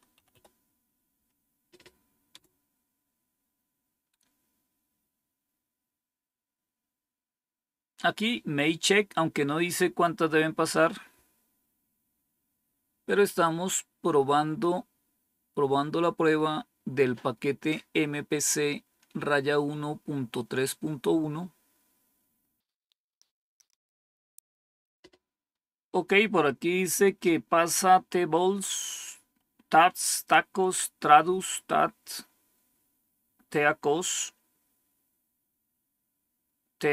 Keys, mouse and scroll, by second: 0.0-0.7 typing, 2.2 Return, 4.6 scroll down 1.